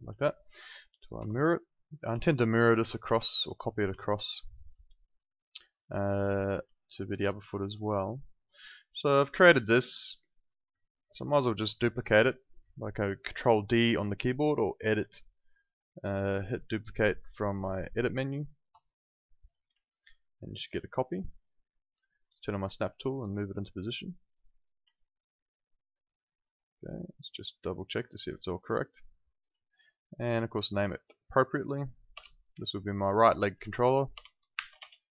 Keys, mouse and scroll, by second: 1.2 F8, 2.2 alt+click, 3.1 alt+click, 3.9 alt+click, 6.7 alt+click, 8.7 alt+click, 11.8 alt+click, 14.8 click, 18.7 click, 19.7 alt+click, 24.9 alt+click, 30.2 click, 32.1 BackSpace, 32.5 Left, 33.6 Right, 34.1 BackSpace, 34.5 shift+r, 34.7 Return, 34.7 KP_Enter.